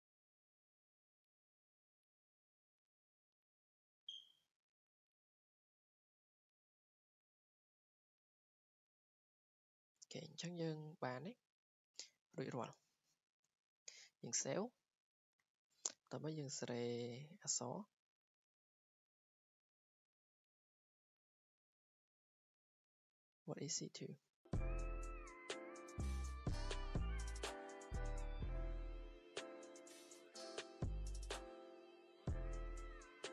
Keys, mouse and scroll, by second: 0.5 click, 1.1 scroll, 1.2 scroll down 4, 1.3-1.8 scroll down 1, 1.8-3.2 scroll up 7, 3.2 drag, 3.3 scroll, 4.0-4.3 scroll, 5.1 scroll, 6.7 click, 7.5 scroll down 10, 8.7 right click, 9.8 Escape, 10.1-11.1 scroll, 11.9 click, 12.7 ctrl+s, 13.7-14.0 scroll, 14.5 scroll, 14.7 scroll down 5, 15.2-15.6 scroll down 2, 16.9 click, 17.6 click, 19.9 click, 21.9 scroll down 4, 22.8 click, 23.4 Escape, 23.7-25.1 scroll, 24.6 click, 25.9 r, 26.1 r, 26.2 r, 26.7 click, 26.8 Escape, 28.2 click, 28.3 Escape, 29.0 click, 29.1 Escape, 29.4 r, 29.8 click, 29.9 Escape, 30.1 click, 30.2 click, 30.2 r, 30.3 r, 31.1 click, 31.2 Escape, 31.8 r, 32.3 click, 32.4 Escape, 32.8 r, 32.9 r.